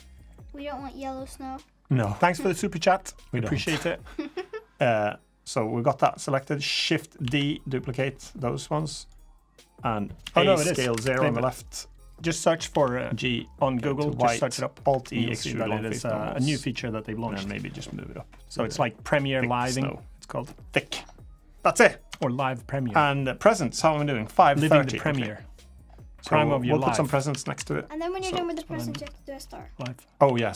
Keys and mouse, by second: 0.8-2.7 drag, 2.9 middle click, 3.0 click, 3.9 click, 7.0 shift+d, 10.0 a, 10.3 s, 12.5 g, 14.7 alt+e, 17.6-20.1 drag, 20.4 click, 21.1 middle drag, 21.9 Tab, 22.3 middle drag, 23.0 drag, 24.9 Tab, 25.3 middle drag, 26.6 Tab, 27.1 Tab, 27.3 KP_1, 28.7 Tab, 29.5 Tab, 30.0 a.